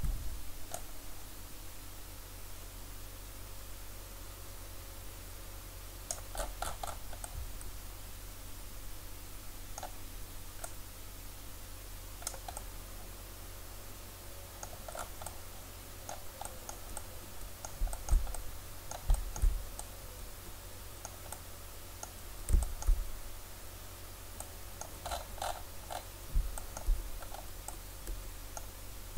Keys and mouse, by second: 0.8-4.1 drag, 6.4-8.3 middle drag, 8.6 middle click, 10.7-12.6 drag.